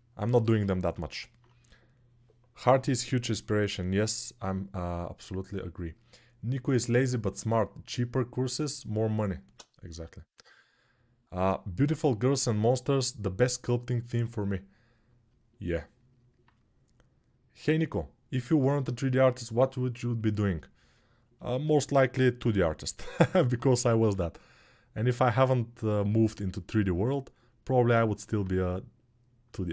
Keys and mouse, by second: 21.7-29.7 alt+drag, 22.3 alt+q, 23.8 g.